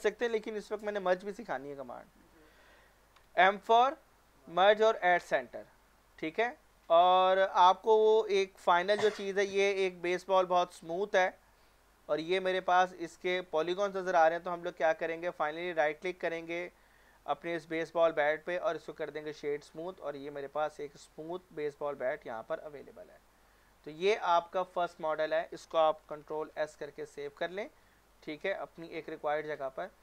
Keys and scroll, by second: 3.2 m, 6.9 Tab, 26.3 ctrl+s.